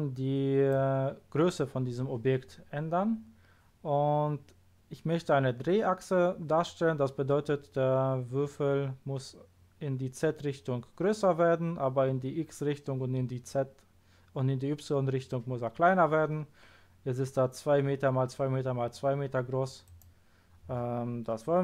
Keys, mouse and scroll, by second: 19.8 click.